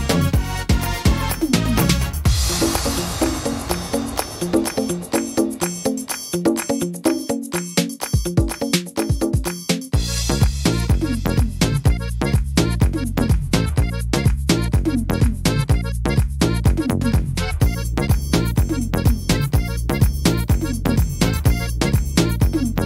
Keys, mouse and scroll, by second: 0.9 click, 1.7 right click, 2.1 shift+right click, 2.5 right click, 2.9 shift+right click, 3.6 click, 5.2 ctrl+r, 6.1 right click, 6.7 shift+right click, 7.5 click, 8.6 middle click, 9.7 click, 10.6 middle click, 11.1 scroll down 1, 11.4 middle click, 13.0 right click, 14.3 middle click, 16.7 click, 17.2 click, 18.0 right click, 18.4 shift+right click, 18.8 middle click, 19.9 shift+d, 21.0 e.